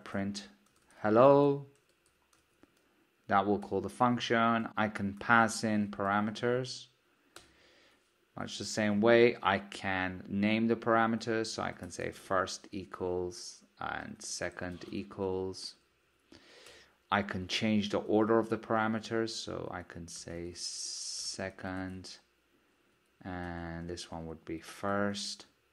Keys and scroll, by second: 7.6 Return, 18.3 super+d.